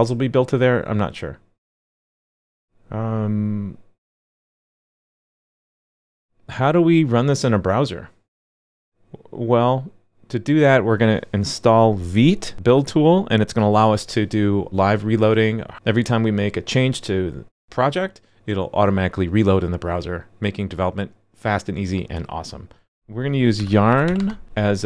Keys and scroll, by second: 5.5 super+k, 5.9 super+z.